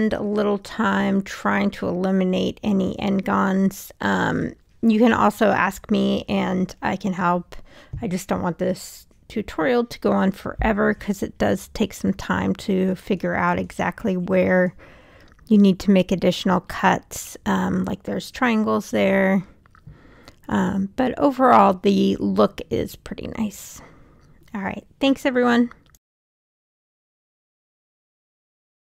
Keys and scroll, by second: 4.7 e, 18.1 3.